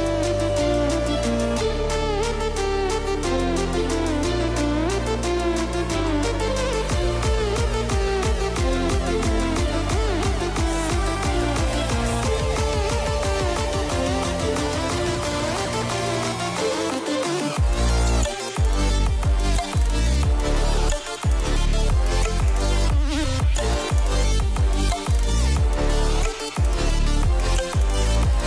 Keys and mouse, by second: 0.6 shift+middle click, 1.0 shift+middle click, 1.3 middle drag, 1.9 shift+middle click, 2.7-3.1 middle drag, 3.3 shift+a, 5.8 click, 7.5 middle click, 8.3-9.7 typing, 9.8 Return, 11.5 middle click, 12.1 s, 14.3 KP_0, 17.3 click, 17.9-18.3 middle drag, 19.2 shift+middle click, 20.7 click, 21.2-22.4 shift+middle drag, 22.5-23.0 middle drag, 23.9 Delete, 24.6 KP_0, 27.6 click.